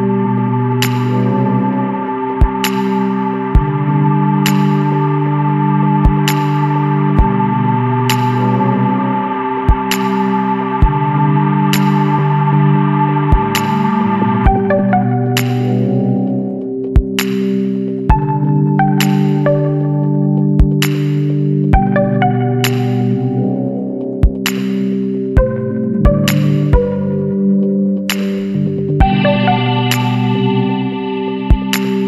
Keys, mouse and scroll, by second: 1.1 click, 3.6 click, 5.5 click, 6.0 KP_Subtract, 6.7 KP_7, 7.5 KP_Enter, 9.9 click, 12.6 click, 13.7 KP_0, 14.0 KP_Decimal, 14.4 KP_7, 14.6 KP_5, 15.0 KP_Enter, 16.2 scroll up 2, 17.4 click, 19.8 click, 20.9 KP_1, 21.1 KP_2, 21.5 KP_Enter, 22.4 scroll down 1, 23.5 scroll down 1, 25.6 click, 26.1 space, 29.2 click, 31.1 click.